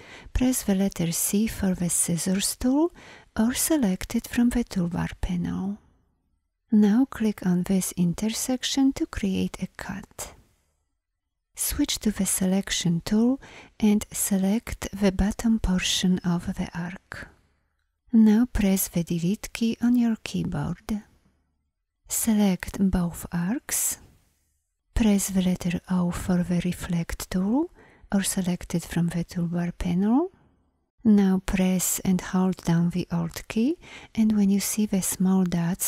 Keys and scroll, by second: 1.0 c, 12.2 v, 18.8 Delete, 25.6 o.